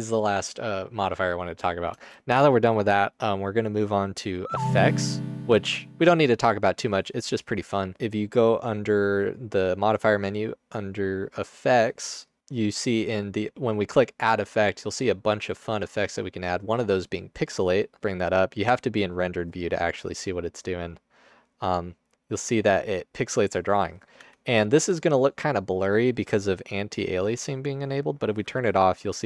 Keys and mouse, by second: 1.9 space, 12.5-13.2 middle drag, 16.0-16.8 drag, 17.8 click, 21.0-23.0 drag, 24.3 Tab.